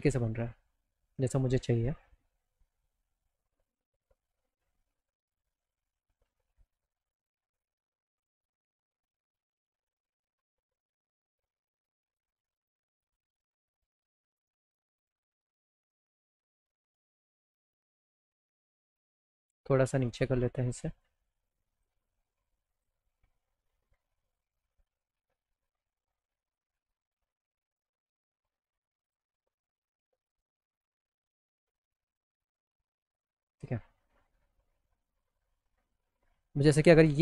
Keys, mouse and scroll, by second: 3.6 alt+click, 5.4 middle click, 6.1-7.8 alt+middle drag, 8.4 click, 9.1 alt+click, 12.1 click, 14.3 right click, 17.8 click, 18.8 click, 20.1 click, 21.0 click, 22.3 click, 24.4-25.8 drag, 28.4 click, 30.1 alt+middle click, 30.3 alt+click.